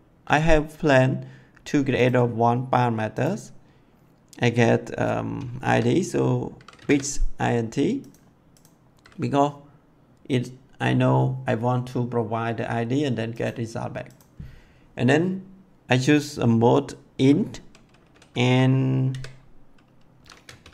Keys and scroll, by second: 6.4-7.3 typing, 19.0 v, 20.3-20.7 typing.